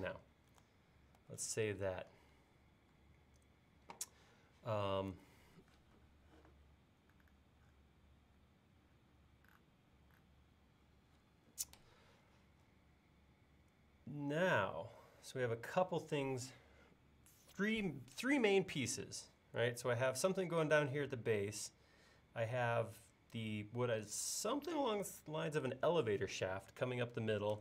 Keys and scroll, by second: 1.2 super+s.